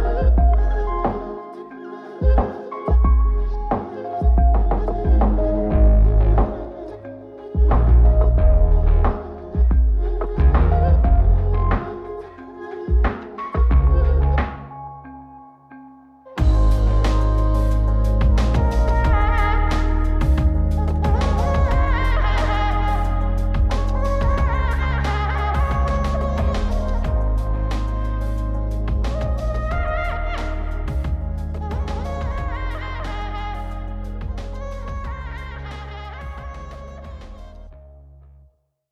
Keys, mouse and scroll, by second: 1.8 click, 4.2-5.0 drag, 6.4 click, 7.1-7.7 scroll down 1, 7.7 click, 8.2-10.4 drag, 17.6 click, 21.5-22.0 scroll down 4, 22.2 middle click, 24.4-25.7 scroll up 2, 25.7-26.5 drag, 26.7 middle click, 27.8 ctrl+shift+click, 30.3-31.3 drag, 33.4 click, 35.1 click.